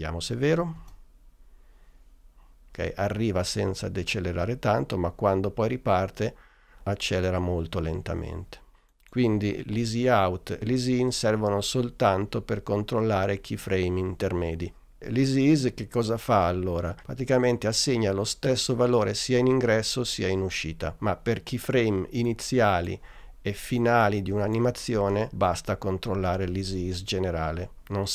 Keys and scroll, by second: 0.8 space.